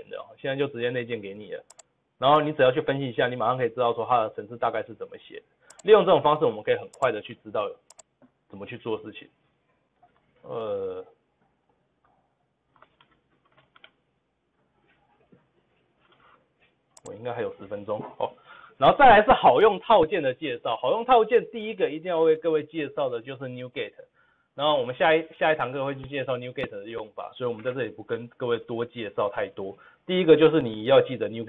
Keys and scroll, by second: 13.8 ctrl+v, 13.8 ctrl+z, 16.7 g.